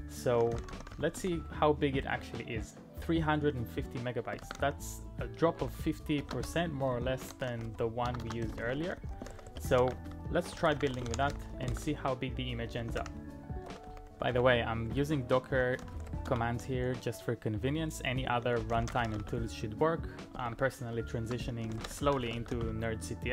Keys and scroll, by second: 0.0-1.7 typing, 4.4 ctrl+a, 4.6-16.8 typing, 18.4-19.9 typing, 20.5 ctrl+e, 20.9-22.6 typing.